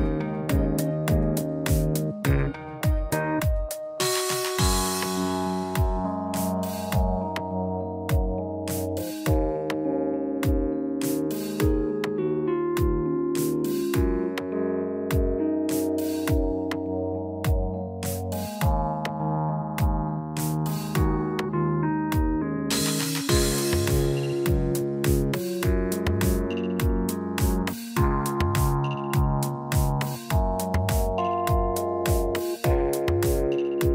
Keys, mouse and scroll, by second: 0.1-0.6 scroll up 3, 0.4 middle click, 2.0 click, 3.5 click, 3.9 middle click, 4.9 click, 5.5 shift+click, 8.5 click, 9.9 ctrl+b, 12.7 Tab, 13.9 ctrl+a, 16.6 Tab, 17.6 ctrl+b, 21.6 click, 21.9 middle click, 22.7 click, 23.1 shift+click, 24.5 alt+m, 26.5 shift+middle click, 27.4 click, 27.6 shift+click, 28.9 shift+r, 29.9 middle click, 31.1 click, 31.4 shift+click, 32.6 shift+r, 33.3 shift+middle click.